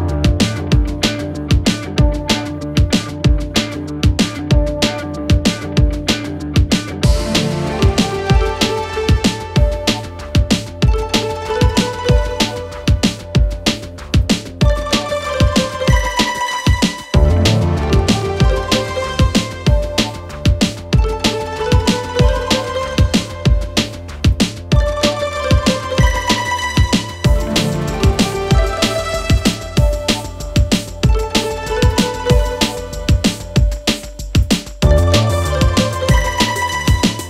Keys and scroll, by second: 14.4 F4, 17.0 Escape, 18.2 F2, 27.0 Escape, 28.8 c, 29.0 e, 30.5 alt+c, 30.6 alt+w, 31.0 p, 35.4 Escape, 35.7 F4.